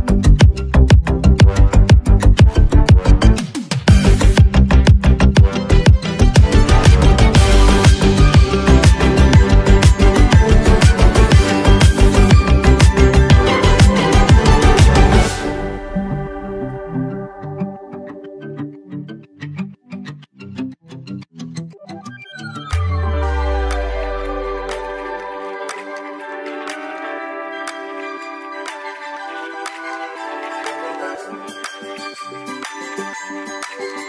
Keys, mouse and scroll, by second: 1.2-12.9 drag, 12.9 ctrl+z, 15.6 x, 16.2-25.7 drag, 27.6-28.1 alt+scroll down 1, 30.0 click.